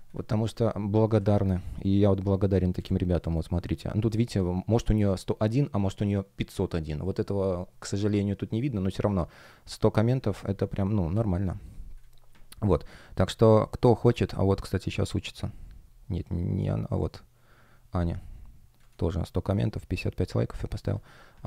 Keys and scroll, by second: 2.7 space, 18.6 space.